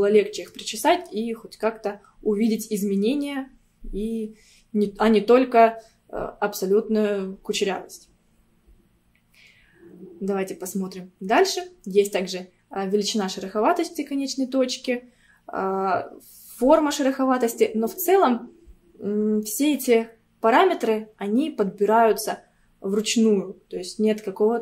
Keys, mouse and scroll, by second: 0.9 scroll up 1, 8.8-11.8 scroll down 1.